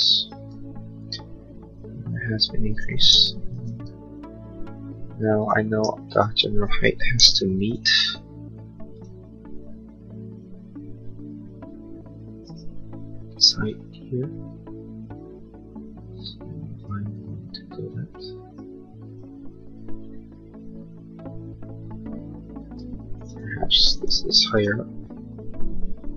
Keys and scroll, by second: 3.2 shift+u, 7.2 m, 22.6 space, 24.0 p.